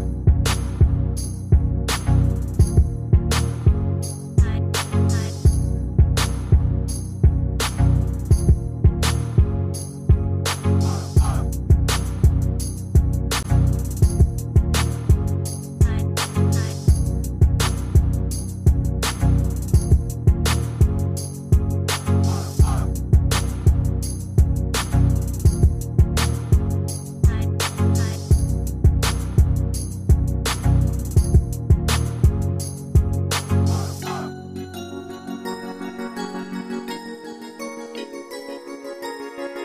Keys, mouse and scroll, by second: 30.6 Return, 30.6 typing.